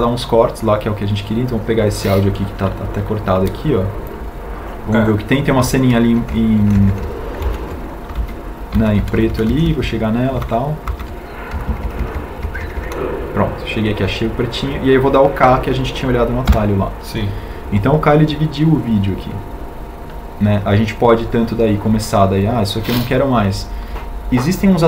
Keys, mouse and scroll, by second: 18.0 k.